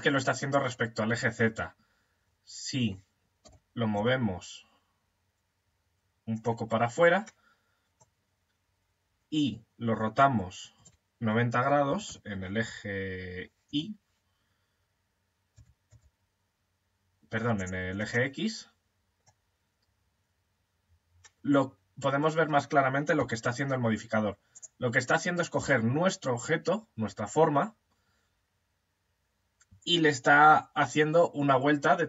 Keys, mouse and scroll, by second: 2.8 g, 5.5 click, 5.8 click, 7.1-9.3 middle drag, 10.2 r, 17.8-22.6 middle drag, 22.6 s, 27.4-30.4 middle drag.